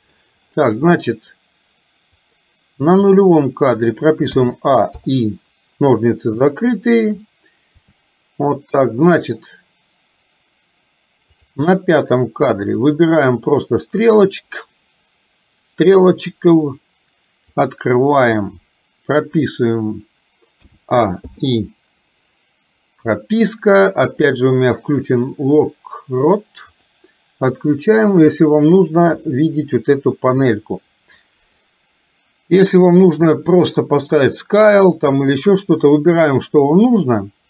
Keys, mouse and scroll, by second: 2.2 click, 4.4 a, 5.0 i, 6.5 shift+middle click, 11.5 click, 12.9 click, 14.1-17.6 drag, 20.6 a, 21.2 i, 24.2-27.6 drag, 29.2 i, 32.9-37.4 drag.